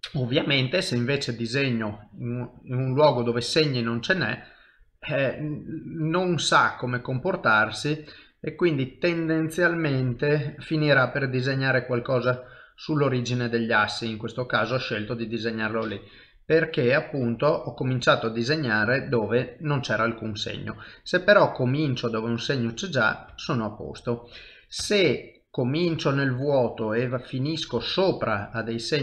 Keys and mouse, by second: 0.4 KP_1, 1.3 click, 3.1 middle click, 6.6 ctrl+middle click, 6.9 shift+middle click, 8.2 middle click, 10.1 ctrl+middle click, 12.5 middle click, 15.1 ctrl+z, 16.5 KP_3, 17.2 KP_1, 18.6 ctrl+middle click, 19.0 shift+middle click, 20.9 click, 22.4 middle click, 23.3 ctrl+z, 23.7 middle click, 24.8 KP_1, 25.9 click, 28.2 middle click.